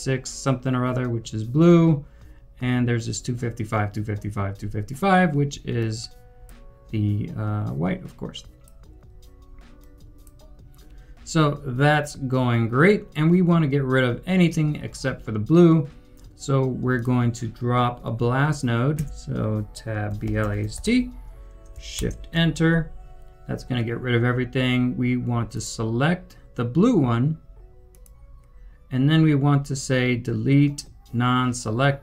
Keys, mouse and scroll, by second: 20.7 typing, 21.9 shift+Return.